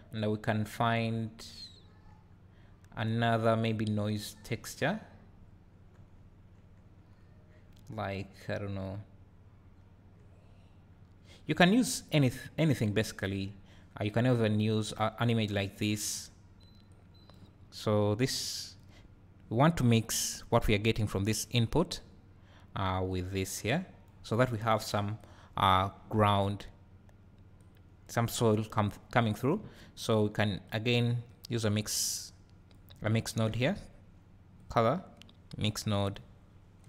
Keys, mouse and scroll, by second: 16.9 click, 18.5 click, 20.2 click, 21.4-24.4 drag, 25.2 click, 27.6 click, 30.6 click, 31.3 click, 36.1 click.